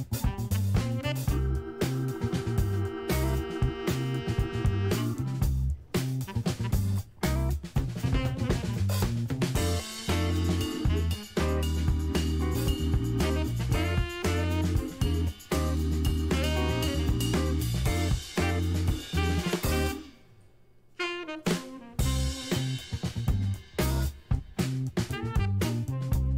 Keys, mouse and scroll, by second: 0.1-11.5 drag, 12.0 shift+a, 15.0 click, 16.0 click, 16.8 shift+click, 18.2 shift+d, 21.6 click, 22.0 ctrl+middle click, 22.6 ctrl+middle click, 23.1 ctrl+middle click, 23.8 ctrl+middle click, 24.8 scroll down 2, 25.0-26.3 ctrl+middle drag.